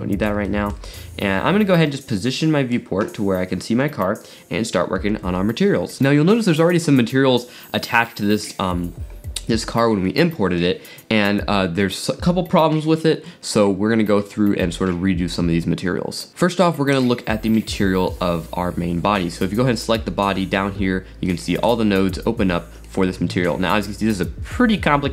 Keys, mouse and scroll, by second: 0.9-1.9 scroll up 5, 1.9 shift+middle click, 2.1-4.9 middle drag, 17.0 click, 21.3-21.7 middle drag, 21.7 drag, 22.0-22.8 scroll up 8, 22.2-24.2 middle drag, 23.9-25.1 scroll up 7, 24.3-25.1 middle drag.